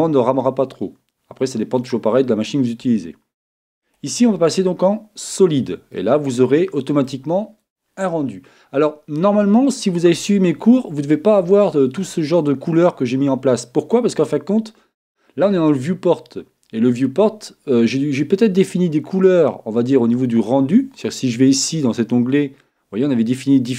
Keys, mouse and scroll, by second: 4.1-5.8 drag, 5.9-7.8 middle drag, 13.3-15.2 middle drag, 18.4-20.2 middle drag.